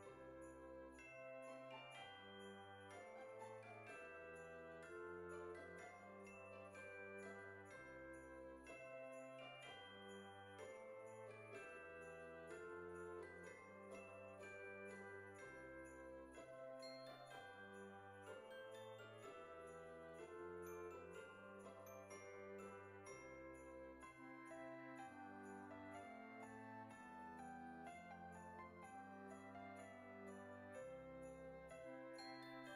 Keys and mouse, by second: 1.9 click, 3.1 KP_0, 4.3 click, 5.5 click, 7.3 F6, 8.2 click, 10.9 click, 12.0 KP_0, 12.3 KP_Decimal, 13.5 KP_1, 14.4 click, 14.5-17.2 typing, 16.1 click, 20.0 click, 25.4 KP_9, 27.4 click, 30.1 click, 30.8 KP_4, 32.0 click, 32.3 KP_3, 32.5 KP_Decimal.